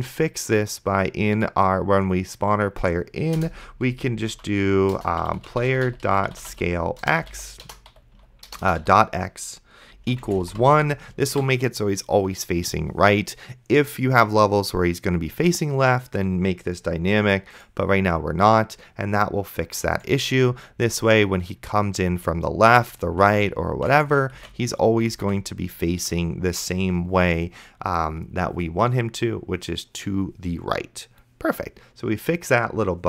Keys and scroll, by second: 3.7 Return, 4.3-10.4 typing, 11.5 ctrl+s, 20.4 d, 22.4 space, 24.6 space, 25.4 space, 26.2 a.